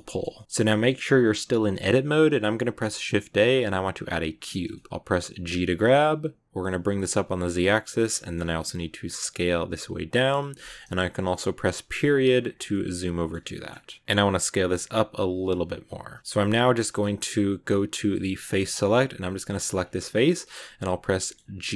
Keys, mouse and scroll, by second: 0.2 scroll up 1, 0.2 middle click, 0.4 a, 0.6 middle click, 0.9 a, 2.1 shift+a, 4.6 middle click, 5.4 g, 8.0 shift+middle click, 8.3 scroll up 2, 8.6 s, 11.7 KP_Decimal, 12.2 scroll down 6, 12.3 scroll up 1, 12.5 scroll down 1, 12.6-14.0 middle drag, 14.0 s, 16.2-18.3 middle drag, 18.3 click, 19.4 right click, 19.6 scroll down 3, 19.7 scroll up 1, 19.7 scroll down 1, 19.8-21.6 middle drag, 21.6 g.